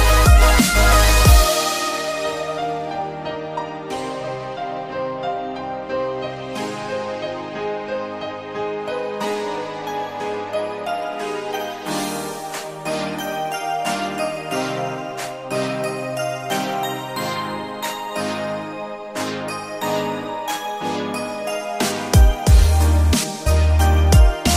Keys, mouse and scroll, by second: 0.4-3.0 drag, 4.7 click, 5.6 b, 8.2 e, 8.8 z, 9.8 2, 10.4 Return, 13.0 click, 13.5 Tab, 13.8 click, 14.3 click, 15.5 click, 17.3 shift+d, 17.7 z, 19.7 click, 20.7-23.3 drag, 24.3 r.